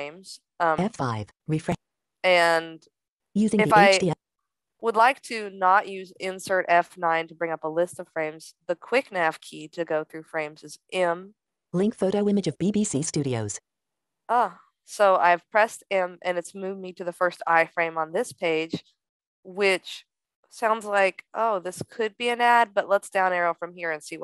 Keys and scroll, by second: 10.1 m.